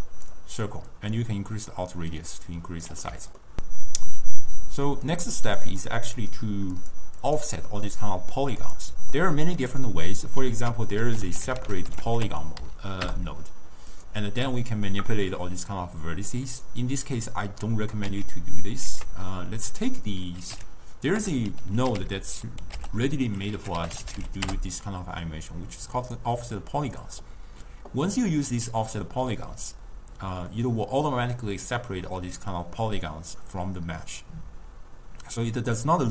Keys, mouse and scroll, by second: 1.2-3.4 drag, 3.4 scroll down 1, 3.5 ctrl+middle click, 5.1 click, 6.8 click, 7.2 click, 7.9-8.7 middle drag, 8.7 click, 9.2-10.6 ctrl+middle drag, 10.6 ctrl+a, 16.6 click, 18.5 x, 18.9 ctrl+a, 22.1 f, 26.6-30.5 drag, 30.5-33.6 middle drag.